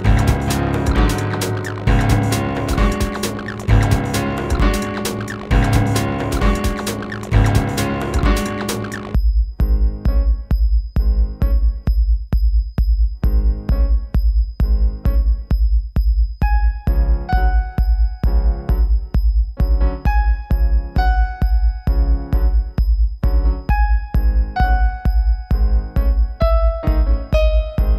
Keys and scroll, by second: 19.4 shift+q, 23.7 ctrl+z.